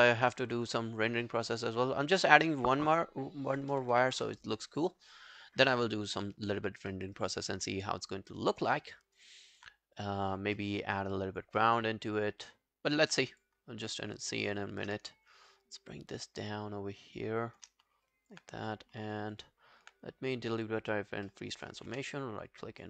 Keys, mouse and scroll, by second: 3.4-4.5 typing, 6.9 alt+middle click, 7.2 alt+right click, 7.5 alt+click, 7.9 alt+middle click, 8.2 alt+scroll down 1, 8.4 alt+click, 8.8 alt+middle click, 9.0 alt+right click, 9.3 alt+click, 10.4 scroll up 2, 10.6 alt+middle click, 10.9 alt+scroll up 3, 11.2 alt+click, 11.6 alt+middle click, 11.9 alt+scroll down 1, 12.5 alt+scroll up 1, 13.6 alt+scroll up 3, 13.6 alt+scroll down 1, 13.9 alt+click, 14.5 alt+middle click, 14.8 alt+scroll up 2, 15.8 shift+click, 17.8 scroll down 2, 18.1 alt+click, 18.9 scroll up 1, 19.2 alt+click, 20.6 double click, 20.9 double click, 21.3 alt+middle click, 21.5 alt+right click, 21.9 w, 22.1 right click.